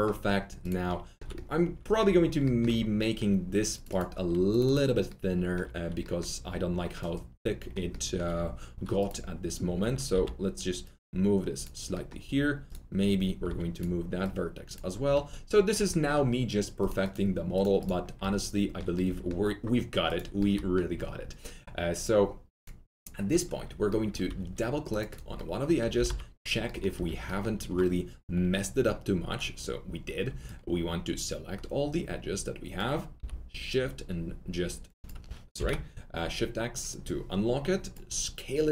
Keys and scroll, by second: 10.1 w, 13.4 1, 25.9 alt+t, 26.0 alt+z, 26.9 alt+F3, 33.1 r, 35.5 shift+x.